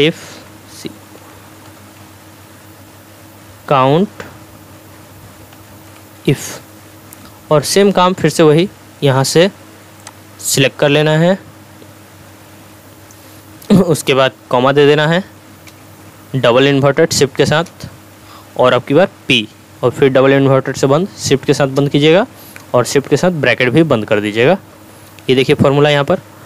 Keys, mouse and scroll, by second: 0.4-2.0 typing, 5.5 t, 7.1 Tab, 10.0-13.1 drag, 15.7 ,, 19.4 p, 21.5 shift+', 23.9 shift+0.